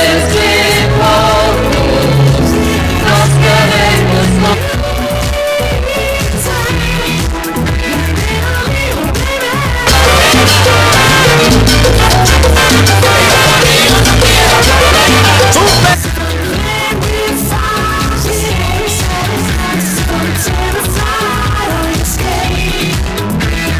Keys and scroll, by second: 4.6 Page_Down, 16.0 Page_Down.